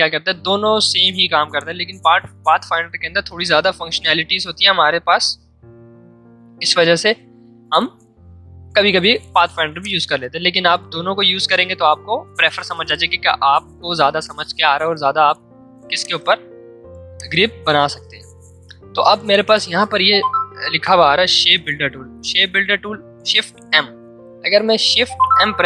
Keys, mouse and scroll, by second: 9.8-12.9 drag, 15.9-19.9 drag, 24.7 click, 25.0 shift+m.